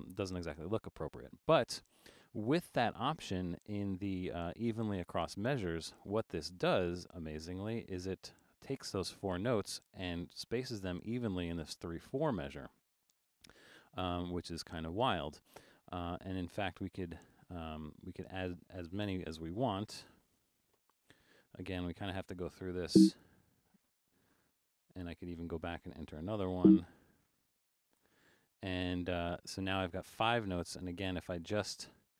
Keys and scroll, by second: 20.0 5, 25.0 Left.